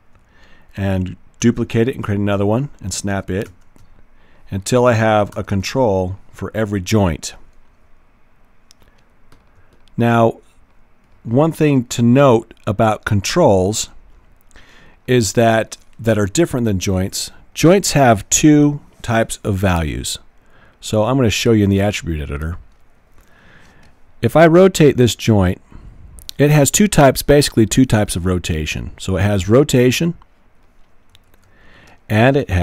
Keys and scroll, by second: 1.4 super+d, 1.7 v, 3.8 v, 5.6 v, 31.2 super+z.